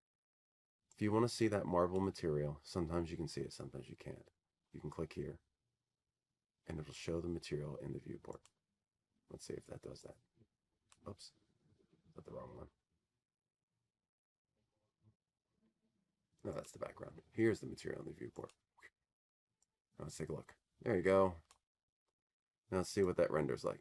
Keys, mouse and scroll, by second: 3.4-5.5 drag, 7.6-9.8 drag, 14.1-16.3 drag, 16.5-18.6 drag, 22.2 click.